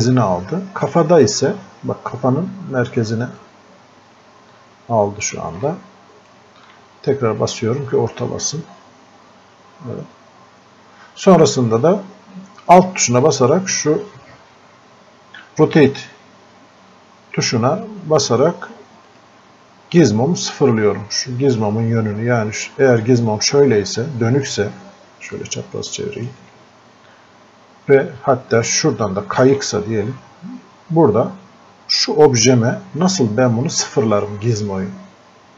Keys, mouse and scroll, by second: 0.8 click, 3.4-7.4 drag, 12.9 click, 19.1 alt+click, 23.4-24.6 alt+drag, 25.7 alt+click, 28.9-32.2 alt+drag, 33.2 scroll up 1.